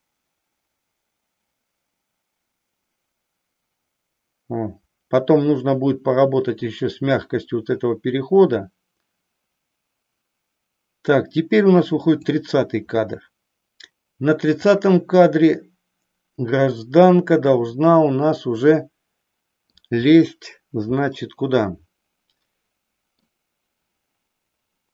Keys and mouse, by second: 14.5-15.6 drag, 16.6-19.7 middle drag, 21.1-23.3 middle drag.